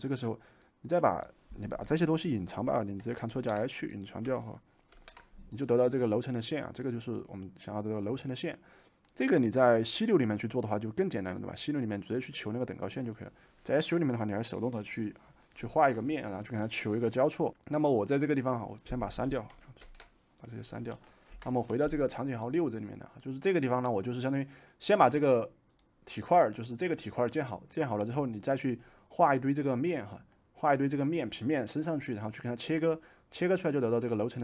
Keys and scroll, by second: 3.3 ctrl+h, 4.9 ctrl+h, 19.7 ctrl+shift+a, 21.2 Delete.